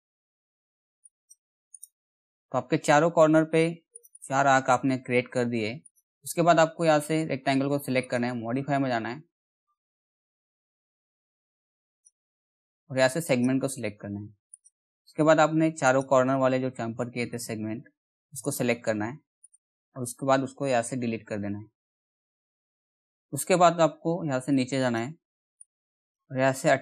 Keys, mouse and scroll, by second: 0.6 click, 1.3 right click, 1.8-3.0 scroll down 1, 3.5 click, 4.7-5.4 scroll up 1, 5.4 click, 11.1-12.9 drag, 15.9-16.2 scroll down 1, 16.4 middle click, 18.0 ctrl+click, 20.4 Delete, 22.3 click, 24.1-26.8 drag.